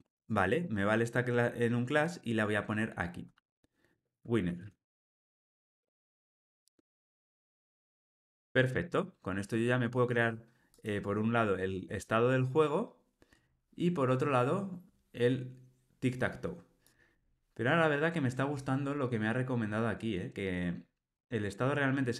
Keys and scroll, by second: 5.5 Escape, 7.1 alt+super+l.